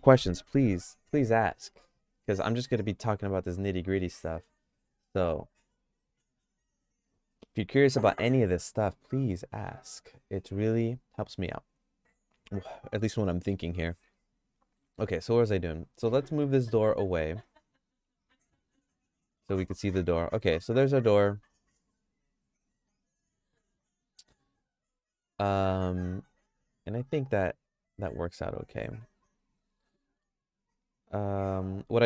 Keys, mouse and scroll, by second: 8.9 middle click, 9.5 middle click, 9.8-14.8 shift+middle drag, 15.0 Tab, 16.4 g, 18.0 g, 19.0 Tab, 19.3 middle click, 19.5-24.3 shift+middle drag, 25.3 middle click, 25.6-28.1 shift+middle drag, 28.9 Tab.